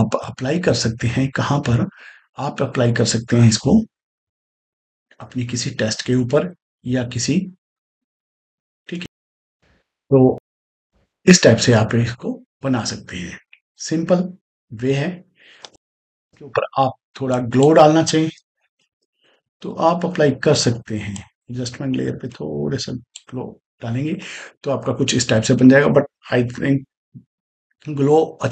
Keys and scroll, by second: 8.8 space, 15.5 space, 18.3-19.5 typing.